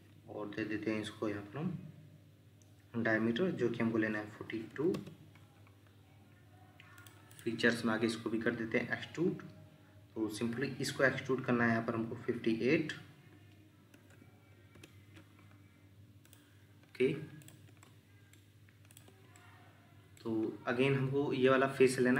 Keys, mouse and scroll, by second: 4.5 typing, 4.9 Return, 7.3 double click, 14.0 typing, 14.7 Return, 17.7 Escape, 17.8 middle click.